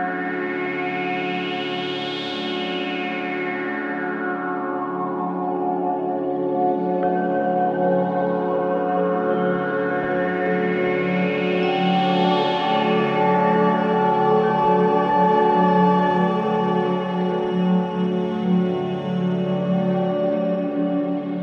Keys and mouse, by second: 0.0 click, 1.0 click, 2.2 click, 4.0 BackSpace, 5.1-6.4 typing, 8.3-9.7 typing, 11.2-11.9 typing, 11.4 click, 12.8 click, 16.5 click, 18.3 click, 19.7 click, 20.4 click.